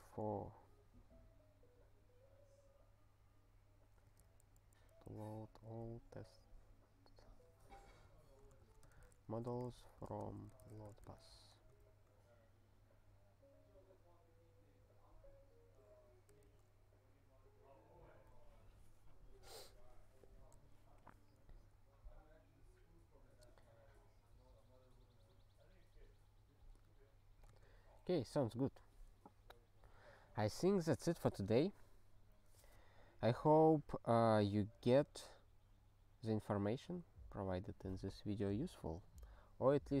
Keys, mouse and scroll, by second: 30.0 click, 30.1 click, 33.1-33.7 scroll up 3, 35.0-40.0 scroll down 3.